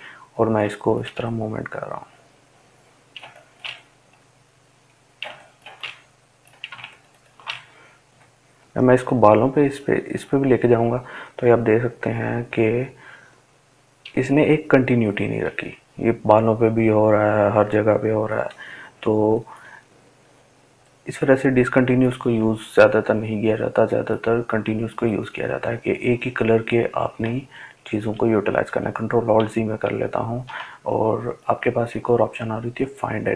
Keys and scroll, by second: 26.2 ctrl+alt+z, 26.6 ctrl+alt+z, 26.9 ctrl+alt+z, 27.3 ctrl+alt+z, 27.7 ctrl+alt+z, 28.2 ctrl+alt+z, 28.7 ctrl+alt+z.